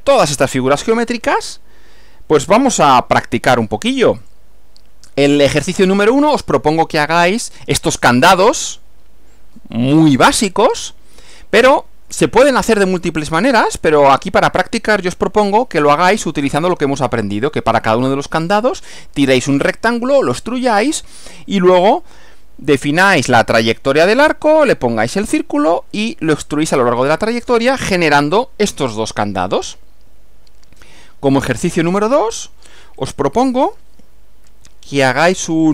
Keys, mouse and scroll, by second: 4.3 click, 12.8 click, 13.7 click, 15.7 Right, 27.9 Left, 30.9 Right, 33.1 click.